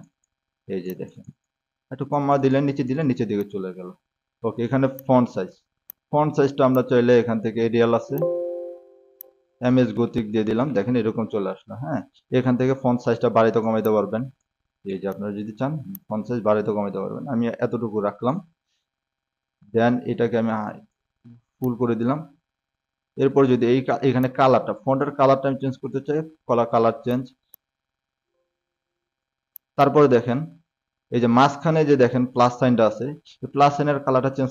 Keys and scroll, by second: 1.4 s, 10.8-12.0 typing, 15.4-16.9 typing, 31.4-32.4 typing.